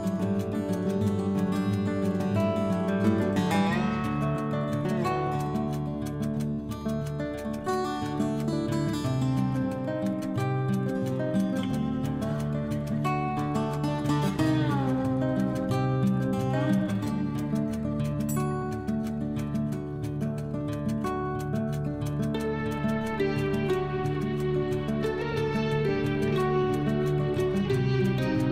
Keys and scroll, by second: 20.1 ctrl+u.